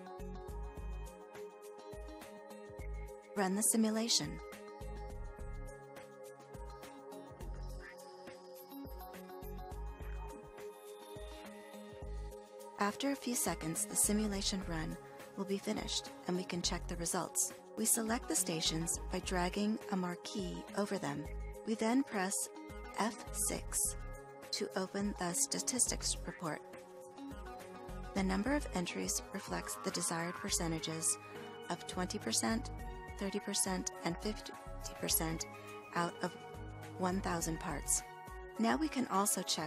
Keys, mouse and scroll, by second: 22.4 F6.